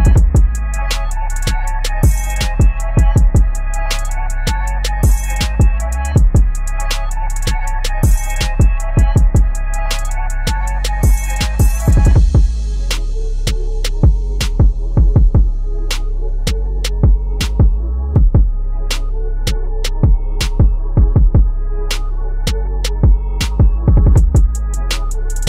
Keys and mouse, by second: 2.1-2.9 typing, 4.1 click, 5.8 v, 6.3-8.9 drag, 8.9 ctrl+t, 9.8-14.0 alt+shift+drag, 14.0 Right, 17.5 Down, 17.7-20.3 ctrl+drag.